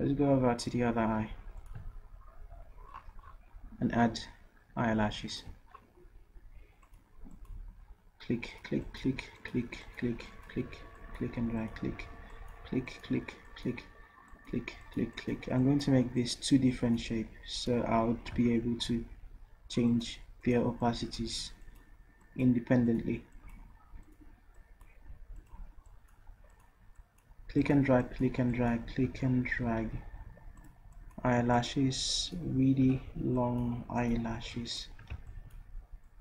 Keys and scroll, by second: 29.7 ctrl+z, 32.9 ctrl+z, 35.3 ctrl+z.